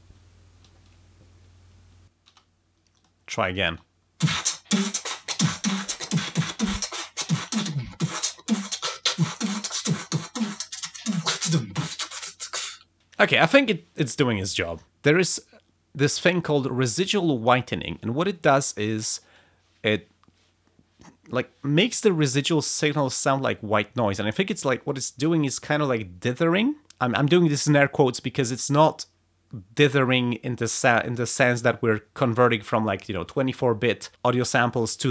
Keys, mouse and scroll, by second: 2.3 space, 2.9 click, 3.5 click, 3.7 space, 5.6 click, 6.6-7.9 drag, 8.0-9.5 drag, 10.0-12.0 drag.